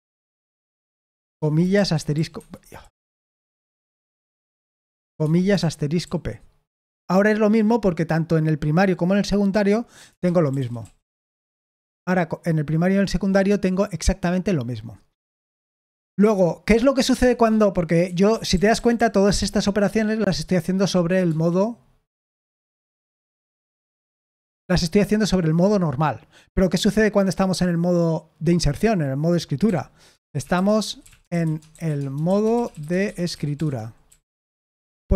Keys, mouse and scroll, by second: 0.0-2.7 typing, 2.3 Escape, 10.2-11.3 typing, 17.1 Escape, 18.0-18.7 typing, 20.1-21.1 typing, 23.7 d, 24.1 shift+g, 29.6-34.8 typing.